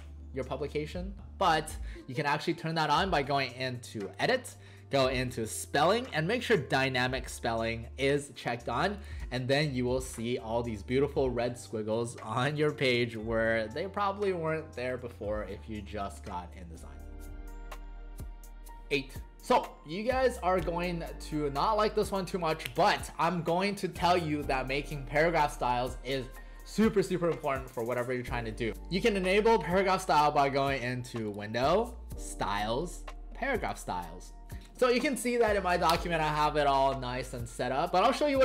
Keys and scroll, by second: 9.2 w, 12.7 alt+space.